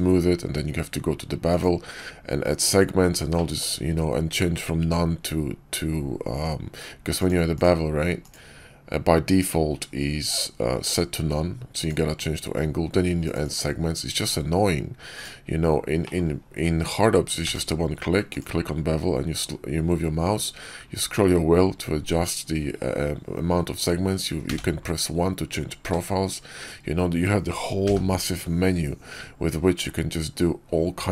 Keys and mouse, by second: 1.4 click, 3.2 click, 7.1 click, 7.5-8.2 drag, 10.7-11.8 drag, 13.1 click, 13.3 click, 15.9 click, 17.3 q.